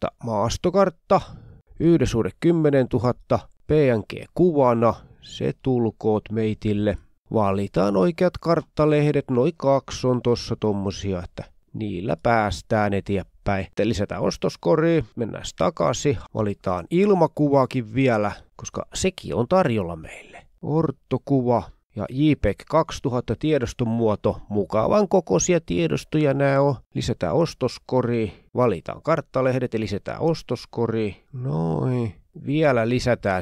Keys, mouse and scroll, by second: 0.0 click, 1.5 click, 2.9 click, 4.4-4.9 scroll down 2, 5.4-5.7 scroll up 2, 6.4 click, 6.9 click, 7.7 scroll down 3, 8.3-8.6 scroll up 2, 9.0 scroll up 2, 9.4-9.8 scroll down 4, 10.5 shift+click, 12.0-12.3 scroll down 2, 13.1 click, 14.5-14.8 scroll up 2, 15.0 click, 18.1 click, 20.5 click, 21.7 click, 22.8-23.2 scroll down 2, 23.4 click, 23.6 click, 24.1 click, 25.2 scroll down 2, 26.2 click, 28.9 click, 29.3 click, 30.5 shift+click, 31.7 click.